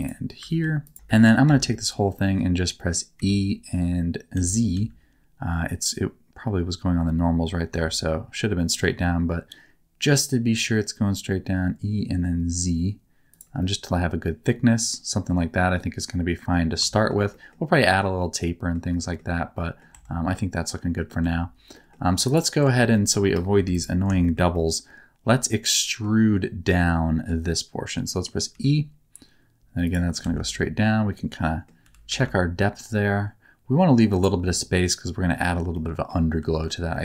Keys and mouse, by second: 0.5 ctrl+r, 1.0 shift+middle click, 1.4 a, 1.7 middle click, 2.7 middle click, 3.1 e, 4.3 z, 4.7 z, 13.6-16.5 middle drag, 16.9 shift+middle click, 17.3 middle click, 18.4 middle click, 19.0 shift+middle click, 19.5 middle click, 19.9 Tab, 20.3 middle click, 21.2 Tab, 21.7 middle click, 22.2 middle click, 22.9 shift+middle click, 23.5 3, 24.2 shift+middle click, 24.5-26.0 middle drag, 26.8 middle click, 28.5 e, 30.2 alt+z, 30.4-31.6 middle drag, 31.8 g, 32.0 z, 35.7 middle click, 36.4 alt+z, 36.9 middle click.